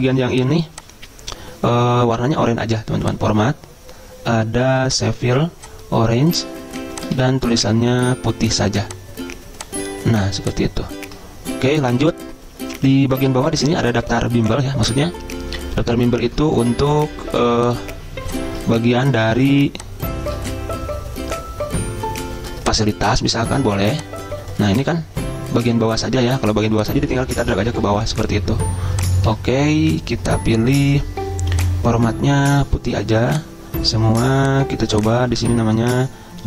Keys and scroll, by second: 7.4 ctrl+a, 25.1 Delete, 29.5 ctrl+a.